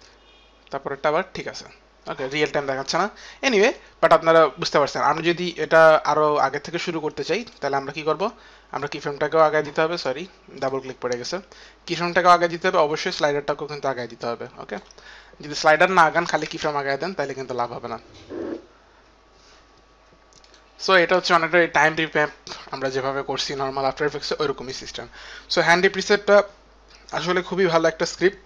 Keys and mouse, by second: 3.4 click, 3.8 click, 7.3 click, 7.6 click, 8.6 click, 12.9 click, 15.9 click, 16.3 click, 16.3 space, 17.1 click, 17.1 space, 20.3 click.